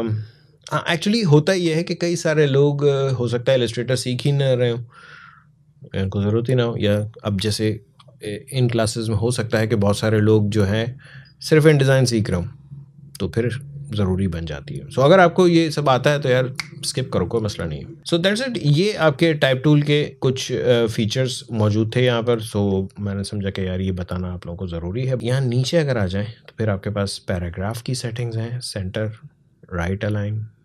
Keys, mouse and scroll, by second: 18.0-18.4 scroll down 1, 19.5-26.6 drag, 28.1 click.